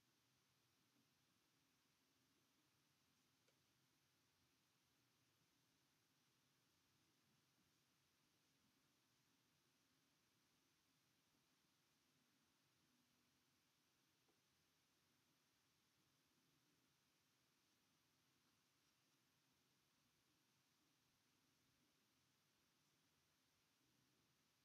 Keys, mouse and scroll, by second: 0.6 z, 2.1 click, 3.1 g, 4.3 r, 5.3 z, 5.8 r, 7.4 g, 9.6-11.0 drag, 11.3 g, 14.5 r, 15.6 g, 18.4 click, 18.6 g, 19.4 r, 21.2 g.